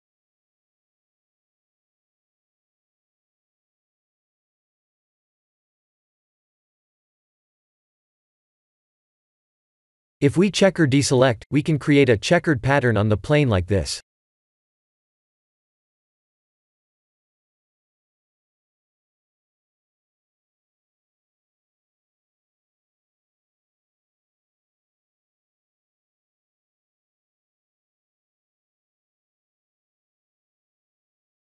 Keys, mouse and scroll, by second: 0.3 Tab, 0.9 right click, 1.3 right click, 2.0 right click, 2.4 right click, 2.8 right click, 4.0 ctrl+z, 5.6 ctrl+z, 8.1 right click, 11.4 click, 13.7 x, 16.2 middle click, 17.6 middle click, 18.0 Tab, 18.5 middle click, 19.3-20.1 scroll up 6, 20.3 middle click, 22.4 Tab, 23.1 3, 23.6 a, 24.5 e, 27.0 Tab, 27.5 middle click, 28.0 click, 28.5-29.1 scroll down 2, 28.9 click, 29.3 middle click, 30.5-31.0 scroll down 5, 31.2 middle click.